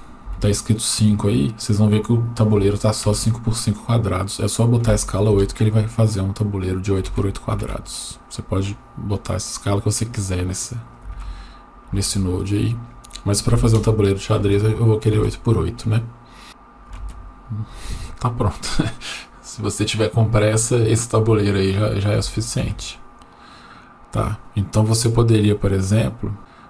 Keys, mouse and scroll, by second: 4.1-5.4 drag, 8.6-10.9 drag, 12.7-13.8 drag.